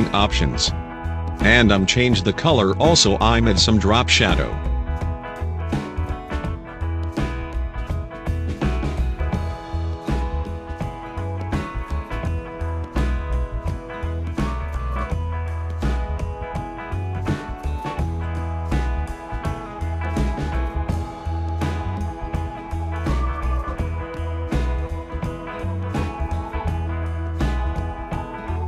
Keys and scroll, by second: 24.4 2, 26.8 5.